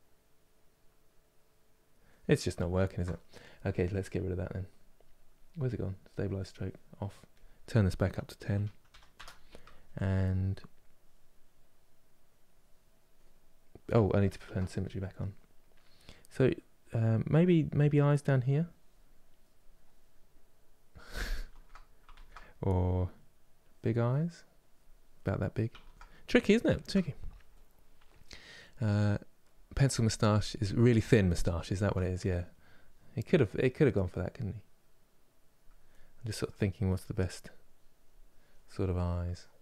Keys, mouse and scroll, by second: 2.3 ctrl+z, 10.6-14.1 drag, 14.1 ctrl+z, 14.5 click, 17.7-20.1 drag, 20.1-21.2 middle drag, 21.2 ctrl+z, 21.9 ctrl+z, 23.3-24.9 drag, 24.9 middle click, 25.5 ctrl+z, 25.8-33.4 middle drag, 33.4-35.6 drag, 35.6-37.3 middle drag, 37.3 click, 38.2-39.6 middle drag.